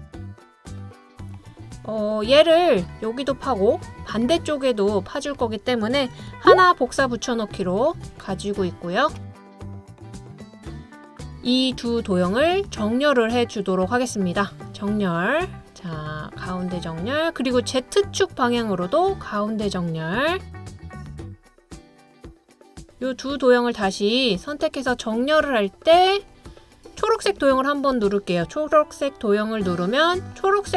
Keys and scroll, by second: 0.0 Down, 6.5 super+c, 6.7 super+v.